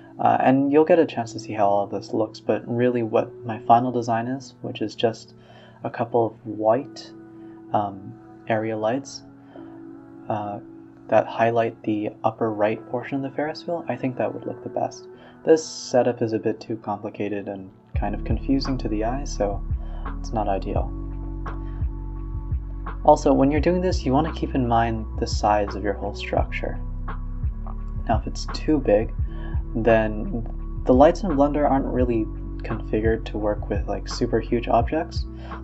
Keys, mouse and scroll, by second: 0.0 click, 0.8-3.2 typing, 3.9-5.3 middle drag, 5.3 KP_0, 6.5 click, 6.9 click, 8.9 click, 9.6 KP_0, 10.8 a, 10.8 click, 11.1 click, 11.4 s, 14.0 click, 14.5 click, 15.8-17.6 drag, 17.8 click, 18.3 s, 20.9-21.9 drag, 21.9 g, 22.3 a, 22.6 a, 24.6 click, 25.2 click, 27.1 click, 28.0 click, 28.8 click, 31.9 click, 32.3 click, 32.6-33.7 scroll up 5, 33.7-35.4 drag.